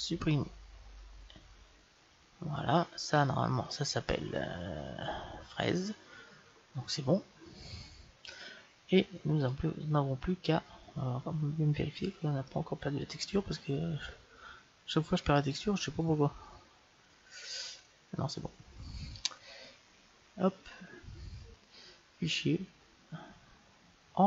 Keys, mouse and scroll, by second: 1.1-2.8 middle drag, 2.8-4.8 right drag, 4.8-6.6 drag, 6.0-10.4 middle drag, 9.1-11.0 drag, 11.7-13.2 middle drag, 13.2 shift+a, 15.6 shift+z, 18.9 shift+z, 20.3-22.3 drag.